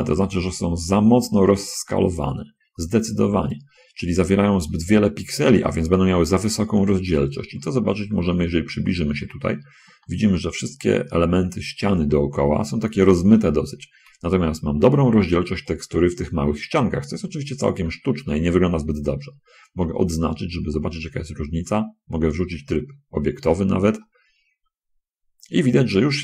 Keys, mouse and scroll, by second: 1.3 middle click, 1.5-3.0 shift+drag, 10.3 shift+middle click, 13.5-13.9 scroll down 2, 14.6 shift+middle click, 14.9 shift+scroll down 2, 15.1 shift+scroll up 2, 15.2 shift+middle click, 17.3 scroll down 1, 17.5 middle click, 18.0 middle click, 20.1 a, 20.9-22.3 drag, 22.5 Tab, 23.5-23.9 scroll down 4, 23.9-26.2 drag.